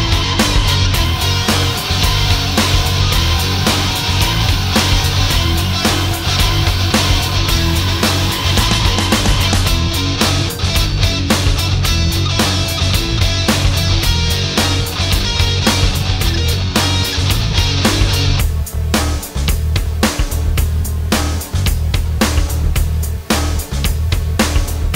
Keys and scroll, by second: 0.8 space, 2.1 space, 3.8 space, 13.8 ctrl+z.